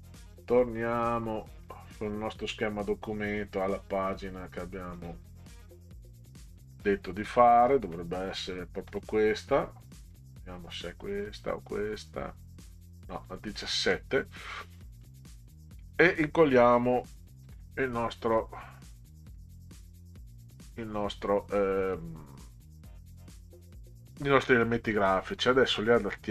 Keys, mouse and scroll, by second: 0.3 click, 1.6 click, 4.9 click, 7.9 middle click, 10.1 click, 11.4 click, 13.2 click, 14.7 click, 15.6 click, 17.5 ctrl+v, 19.4-19.8 middle drag, 25.4 click.